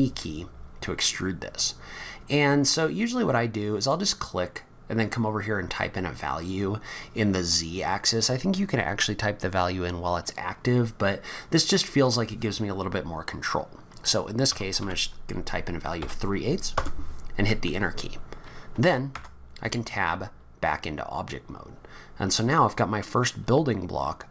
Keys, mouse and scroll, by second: 11.8 click, 19.1 Tab, 19.6-20.0 scroll down 3, 20.4-21.2 scroll down 2, 21.7-22.1 scroll up 4.